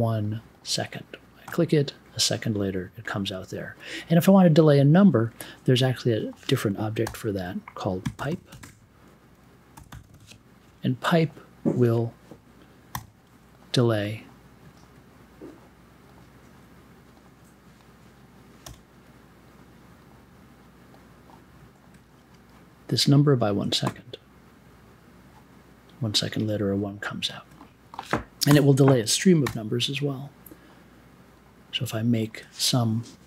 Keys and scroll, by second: 7.0-9.7 typing, 12.9 m, 13.3 1, 18.6 i, 28.4 BackSpace, 29.4 i.